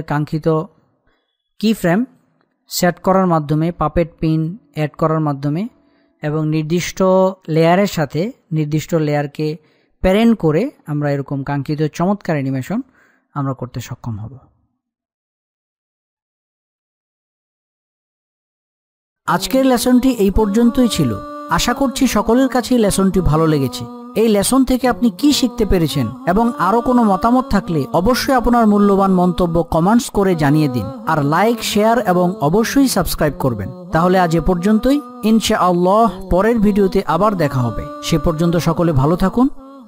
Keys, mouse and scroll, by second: 0.5 click.